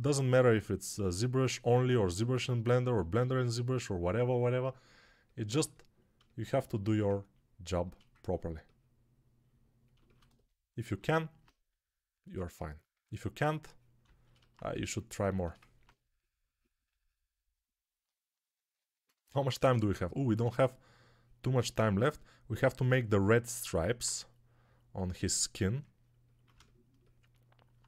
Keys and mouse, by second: 10.8 alt+q, 17.8 click, 17.8 right click.